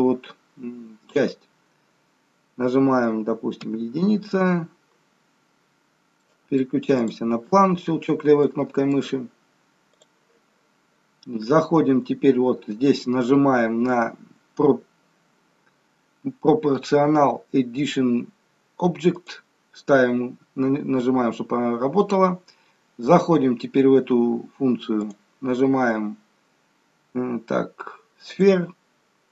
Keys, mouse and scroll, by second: 3.8 KP_1, 5.9-6.3 scroll up 1, 6.3 middle click, 7.1 click, 8.5 middle click, 19.2 click, 25.0 click.